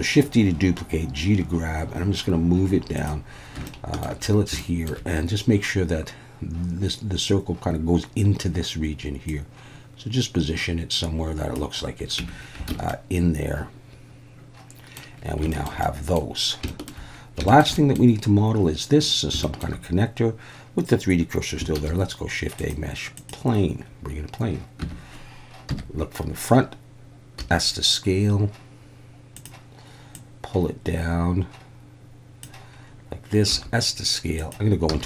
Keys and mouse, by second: 3.0 click, 3.7 shift+middle click, 4.7 shift+middle click, 9.3-11.5 drag, 12.2 Tab, 12.7 alt+a, 12.9-15.0 middle drag, 15.5 shift+middle click, 15.9 middle drag, 16.7 shift+middle drag, 17.5 shift+middle click, 17.7 middle drag, 19.4 shift+middle click, 21.8 shift+a, 25.7 Tab, 25.7 KP_1, 27.4 s, 29.4 click, 30.1-32.4 drag, 33.5 s, 34.4 click, 34.9 z.